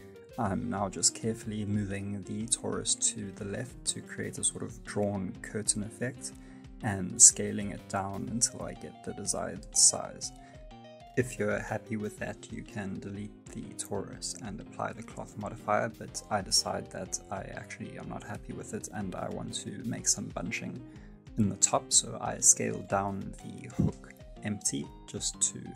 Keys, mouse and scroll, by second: 5.2 middle click, 5.7 space, 5.9 scroll down 1, 6.1 middle click, 7.1 space, 7.8 s, 12.3 space, 12.4-12.7 scroll down 3, 12.5 middle click, 12.8 shift+middle click, 13.0 middle click, 13.2 scroll up 1, 13.4 middle click, 13.6 middle click, 14.0 scroll up 1, 14.3 x, 15.0 middle click, 15.6 right click, 15.8 shift+middle click, 16.6 middle click, 16.9 middle click, 17.3 ctrl+z, 17.5 ctrl+z, 17.9 middle click, 18.2 space, 19.2 right click, 19.6 s, 24.1 space, 24.3 middle click, 25.5 right click.